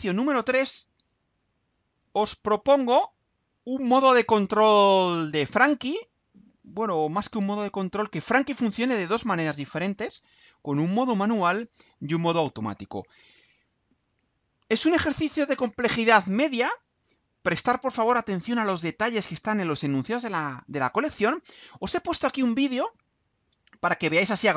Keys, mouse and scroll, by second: 0.8 scroll down 2, 22.5 click.